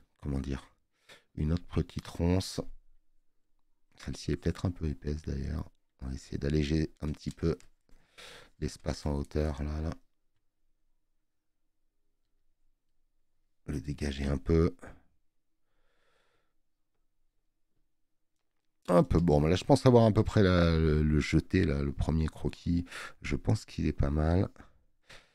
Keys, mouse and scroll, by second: 19.1 space, 19.3 click.